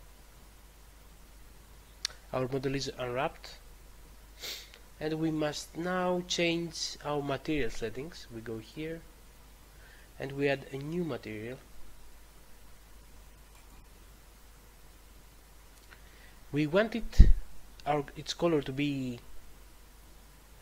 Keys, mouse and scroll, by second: 8.5 click, 13.5 click.